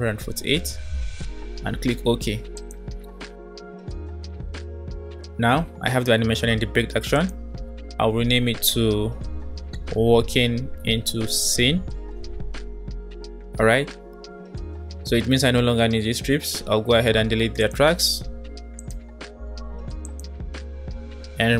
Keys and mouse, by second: 6.9-12.8 drag, 8.0-8.3 BackSpace, 11.9 e, 17.6 click, 18.2 Delete, 18.8 click, 19.1 Delete, 20.1 click, 20.7 Delete.